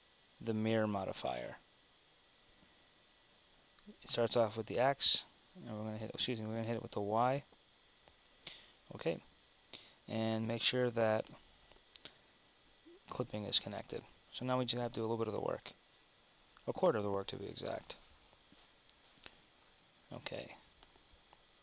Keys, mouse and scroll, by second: 13.9 Tab, 15.4 Tab, 15.9 Tab.